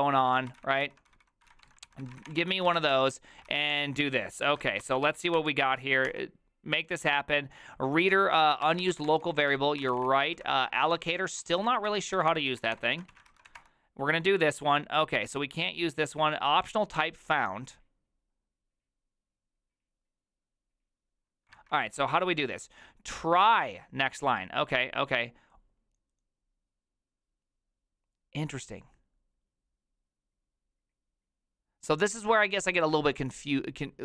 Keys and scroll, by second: 0.0-3.3 typing, 3.5 ctrl+c, 3.7 Return, 4.5 ctrl+a, 4.8 2, 5.0 ctrl+c, 5.2 ctrl+c, 5.4 Up, 6.1 Return, 8.2 ctrl+a, 8.4-13.6 typing, 21.6 alt++.